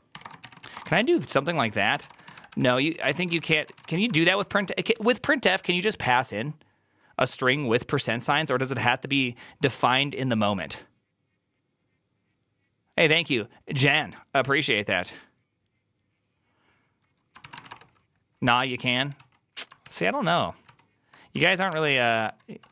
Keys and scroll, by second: 0.0-4.4 typing, 17.2-18.0 typing, 18.9 ctrl+h, 19.0 ctrl+t, 19.7 ctrl+h, 20.1 ctrl+c, 20.5 ctrl+t, 21.3-22.2 typing, 22.6 ctrl+o.